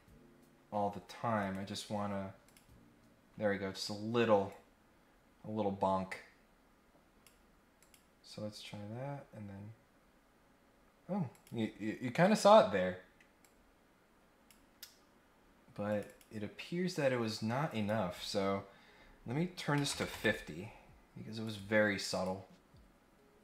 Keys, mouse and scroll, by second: 1.4 right click, 2.4 click, 4.5-7.2 drag, 7.8 click, 11.3 click, 13.3-14.4 drag, 15.9 click, 17.6 click, 21.4 click, 22.1 click, 23.2 scroll up 1.